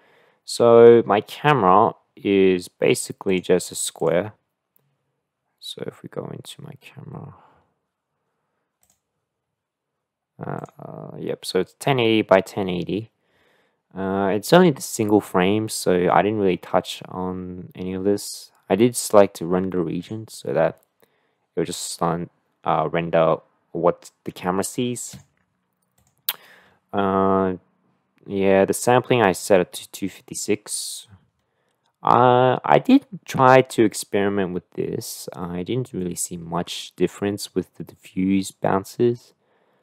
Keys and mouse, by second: 3.3 click, 10.6 click, 25.1 click, 26.0 click.